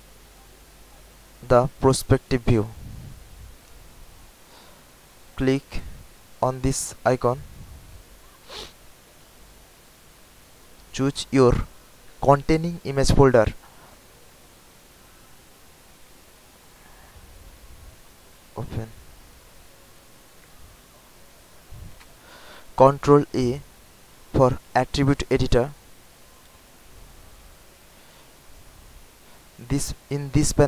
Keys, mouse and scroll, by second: 0.4 alt+click, 0.9 alt+right click, 1.5 alt+click, 2.0 alt+right click, 3.0 alt+middle click, 5.0-6.0 drag, 6.8-18.2 drag, 23.2 ctrl+a, 26.2 scroll down 1, 28.7 click.